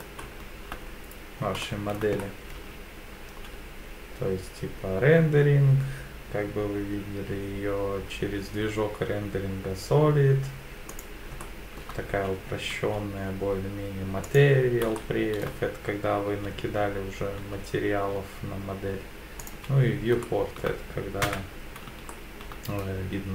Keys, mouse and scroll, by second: 0.3-1.1 shift+scroll down 4, 1.6 shift+middle click, 2.2-2.6 scroll up 2, 2.6 z, 3.3 z, 11.4 shift+middle click, 12.2 z, 12.7 z, 15.0 shift+middle click, 16.3 z, 17.4 z, 20.2 shift+middle click, 21.2 KP_1, 22.1 shift+middle click.